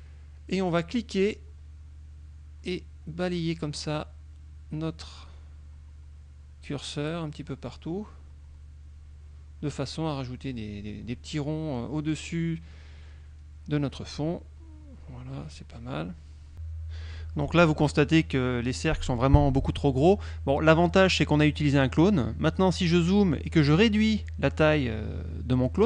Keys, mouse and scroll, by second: 1.1-17.6 drag, 18.3 middle click, 19.7 click, 21.2 click, 21.8 middle click, 22.8 click, 25.6 ctrl+shift+click.